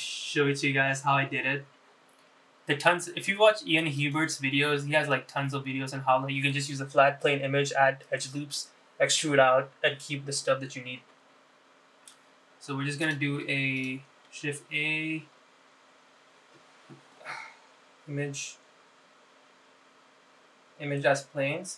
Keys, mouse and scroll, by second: 0.5-2.6 scroll down 5, 5.3-14.9 drag, 14.9 click, 15.7 shift+a.